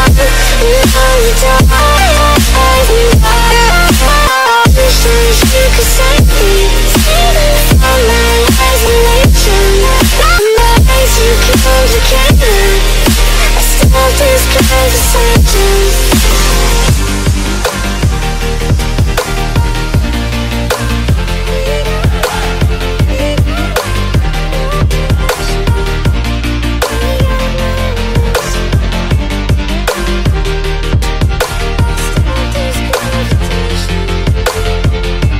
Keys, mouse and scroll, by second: 1.5 click, 2.3 click, 6.0 click, 6.2 alt+Tab, 7.4 alt+Tab, 8.0 middle click, 8.2 middle click, 11.0 click, 11.2 middle click, 11.3 middle click, 11.8 middle click, 11.9 middle click, 12.9 scroll, 13.1 click, 16.0 click, 17.1 click, 17.5 z, 18.1 scroll, 18.7 middle click, 18.8 middle click, 20.4 ctrl+click, 20.9 ctrl+click, 21.3 ctrl+click, 23.1 click, 24.0 click, 25.0 z, 27.6 click, 28.6 z, 29.0 middle click, 29.8 z, 30.2-30.8 middle click, 31.2 middle click, 33.1 click, 33.3 z, 33.7 middle click, 34.9 click.